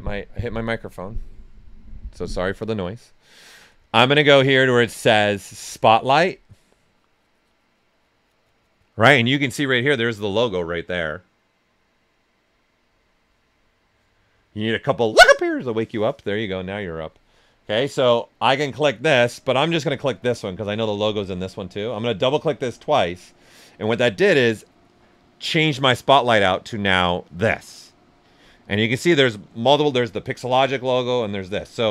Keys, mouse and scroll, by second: 7.8 click, 19.5 click, 22.1 click.